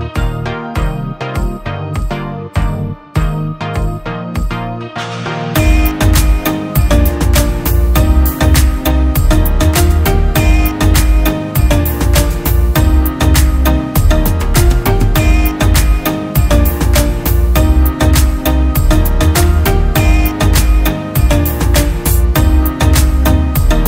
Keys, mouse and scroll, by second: 7.1 alt+click, 10.8 double click, 13.9-14.6 typing, 20.6 typing.